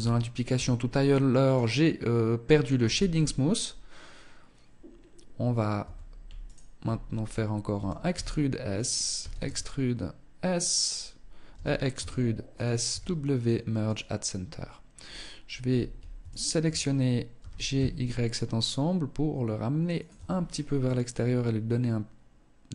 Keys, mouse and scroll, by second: 0.6 click, 2.0 t, 5.0 Tab, 5.6 alt+right click, 7.0 e, 8.4 e, 10.7 e, 12.0 w, 13.6-14.0 scroll up 3, 15.4 alt+shift+right click, 16.6 g, 19.4 Tab, 19.5-20.0 scroll down 4, 20.0 middle click, 22.3 scroll up 4.